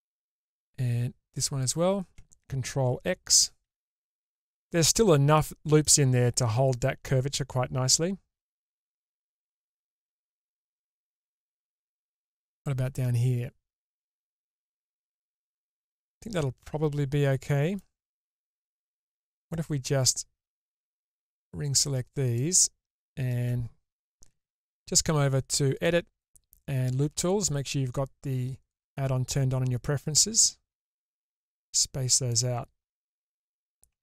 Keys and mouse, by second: 3.6 ctrl+x, 4.7 middle click, 5.8-10.2 middle drag, 10.7 middle click, 12.6-14.7 middle drag, 15.9-17.7 middle drag, 25.7 click, 28.7 click, 31.1 click, 32.3-33.7 middle drag.